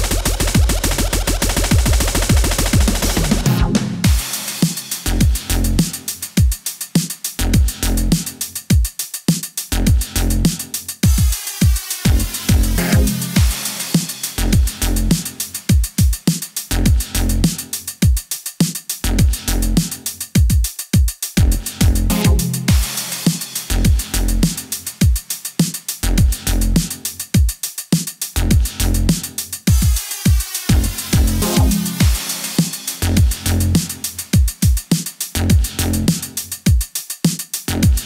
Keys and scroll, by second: 0.3 Home, 3.6 KP_2, 3.9 Home, 5.9 typing, 6.3 Home, 10.9 Home, 11.8-12.4 typing, 12.2 Home, 12.4 Home, 13.7 KP_0, 14.0 space, 16.6 KP_0, 17.6 space, 18.6 space, 20.9 KP_0, 21.7 space, 23.0 space, 23.9 KP_0, 25.0 space, 25.8 space, 28.7 KP_1, 29.1 ctrl+KP_0, 30.2 Return, 31.3 super+s, 33.8 KP_0, 34.0 super+s.